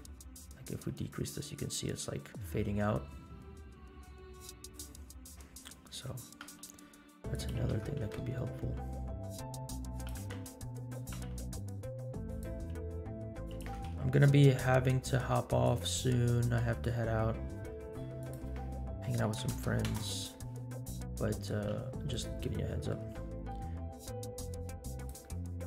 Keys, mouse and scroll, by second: 0.6-4.8 drag, 5.3-5.7 middle drag, 6.4 r, 7.6 g, 10.1 r, 11.2 r, 12.8 s, 13.6 g, 16.8-18.0 drag, 18.2-20.0 drag, 21.1 middle click, 21.7 g, 22.5 middle click, 23.1 r, 25.3-25.6 middle drag.